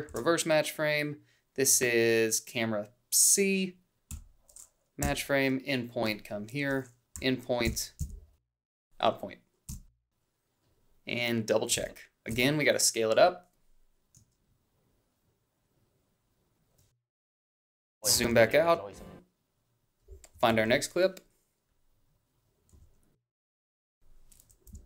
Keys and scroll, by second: 0.1 ctrl+shift+f, 4.2 f, 5.0 i, 7.1 i, 7.6 Down, 8.5 Left, 8.7 o, 9.7 b, 11.8 ctrl+b, 20.4 =, 22.8 a, 24.7 Up.